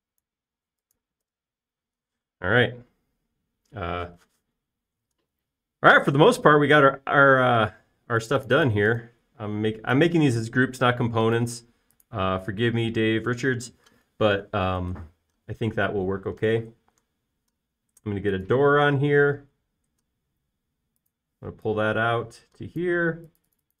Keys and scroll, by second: 1.7 space, 2.3 BackSpace, 17.9 r, 22.7 p.